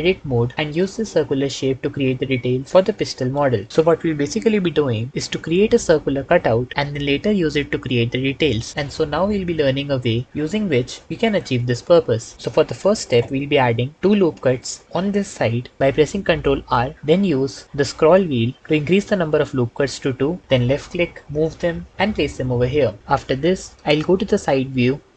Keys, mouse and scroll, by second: 0.4 Tab, 16.3 ctrl+r, 17.7 s, 18.0 KP_2, 20.6 click, 23.0 KP_3, 23.1 KP_3, 23.7 ctrl+KP_3.